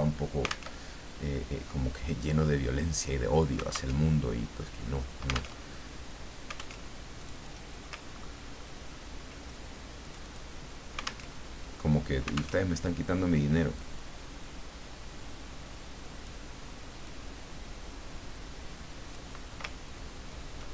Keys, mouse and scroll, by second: 0.8 alt+Tab, 3.9 alt+Tab, 5.6 alt+Tab, 6.8 alt+Tab, 7.2 alt+click, 8.1-8.7 ctrl+scroll up 2, 8.9 ctrl+scroll up 2, 10.0 click, 11.3 alt+Tab, 12.5 alt+Tab, 13.7-16.3 drag, 17.0-19.5 drag, 19.9-20.3 ctrl+scroll down 2.